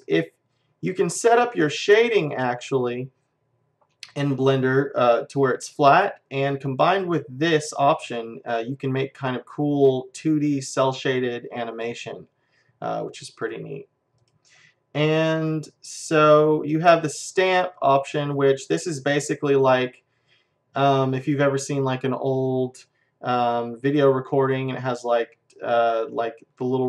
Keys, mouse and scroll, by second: 0.0 `, 1.0-3.7 middle drag, 13.5-16.0 drag, 17.0-18.9 drag, 19.0-23.0 middle drag, 20.1-21.2 scroll down 1, 21.2-21.9 scroll down 1.